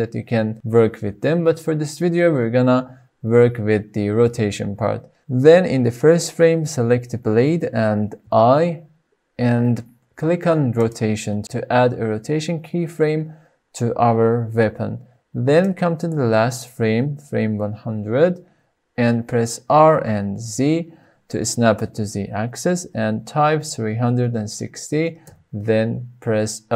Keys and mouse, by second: 18.0-21.5 drag, 22.4 r, 22.7 z, 25.8 KP_3, 25.9 KP_6, 26.3 KP_0.